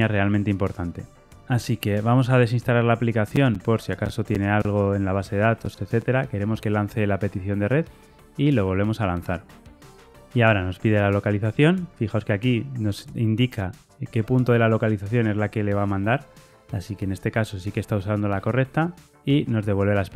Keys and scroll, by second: 8.0 ctrl+r, 8.0 shift+F10.